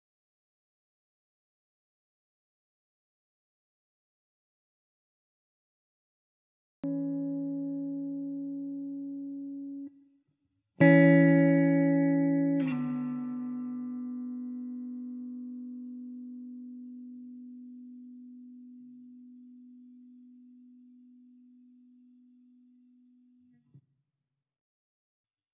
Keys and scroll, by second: 15.2 ctrl+t, 20.9 Escape, 22.6 Delete.